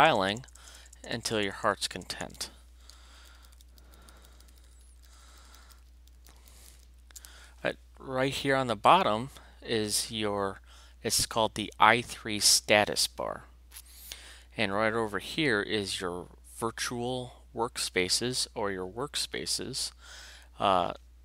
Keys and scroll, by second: 3.2 alt+shift+q.